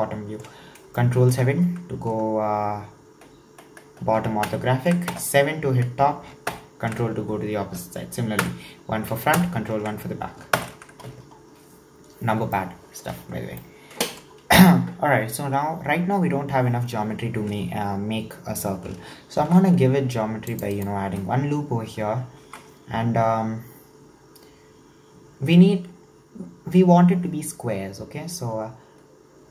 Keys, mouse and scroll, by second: 0.5-1.0 scroll up 2, 1.0-4.1 shift+middle drag, 4.5 ctrl+KP_7, 5.1 KP_7, 6.5 ctrl+KP_7, 8.4 KP_1, 9.3 ctrl+KP_1, 10.6 ctrl+KP_7, 11.6-12.6 scroll up 2, 12.6-16.7 shift+middle drag, 19.4 ctrl+r, 22.4 ctrl+r.